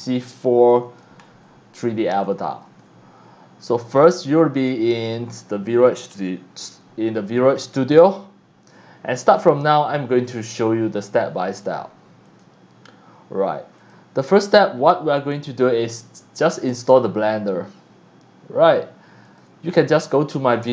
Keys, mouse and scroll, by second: 1.2 scroll up 1, 1.8 scroll down 1, 2.1 x, 2.3 click, 2.7 c, 3.9 click, 12.3 click, 13.8 click, 15.8 click, 19.2 click, 20.6 click.